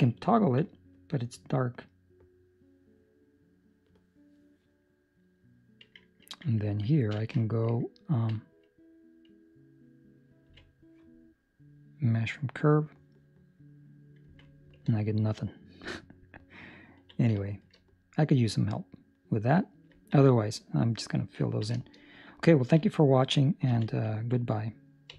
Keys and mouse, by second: 1.9 middle click, 10.4 q, 14.8 Tab, 15.0 ctrl+middle click, 17.4 shift+middle click, 17.8 middle click, 20.0 ctrl+middle click, 21.5 ctrl+middle click, 21.7 shift+middle click, 21.8 shift+middle click, 22.0 middle click, 22.5 ctrl+middle click, 23.6 z.